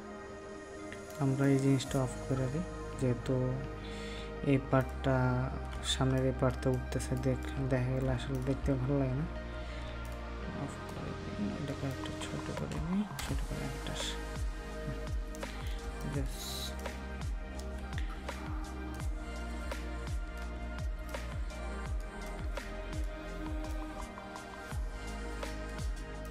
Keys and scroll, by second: 9.0 ctrl+g.